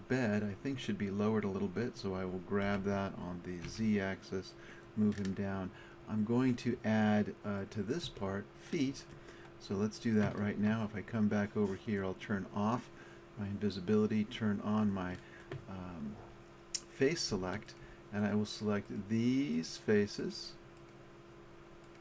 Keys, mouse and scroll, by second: 0.1 click, 2.7 g, 4.8 click, 8.1 Tab, 11.9-14.0 middle drag, 14.7-16.5 middle drag, 16.6-17.7 middle drag.